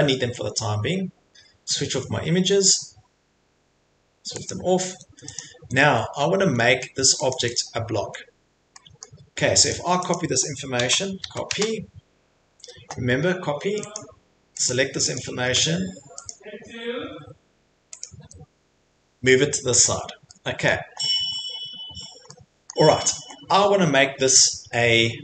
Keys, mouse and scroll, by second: 3.9 click, 4.5 click, 5.3 click, 5.6 Escape, 5.8 middle click, 6.0 Escape, 6.0 middle click, 6.8 middle click, 7.3 click, 7.5 click, 8.0 Escape, 8.5 middle click, 9.0 middle click, 9.7 click, 10.1 click, 10.8-11.2 typing, 12.5 Escape, 13.9 click, 14.7 click, 15.1 click, 16.3 click, 18.0 click, 18.2 Escape, 19.9 middle click, 20.2 middle click, 20.7 middle click, 22.7 middle click.